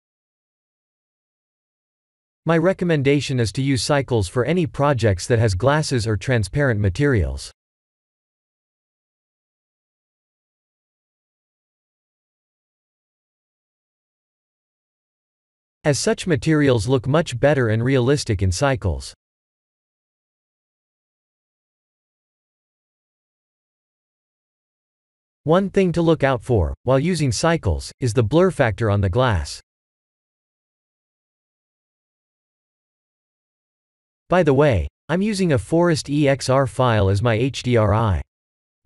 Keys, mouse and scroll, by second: 1.1-4.8 middle drag, 5.1-5.5 middle drag, 7.9-10.2 drag, 10.5-12.9 middle drag, 15.0 g, 15.5 z, 20.4 click, 21.1-23.5 middle drag, 25.7-27.0 drag, 28.1 middle click, 29.1 middle click, 32.5 click, 34.5-35.6 drag, 37.1 click, 38.7-38.8 middle drag.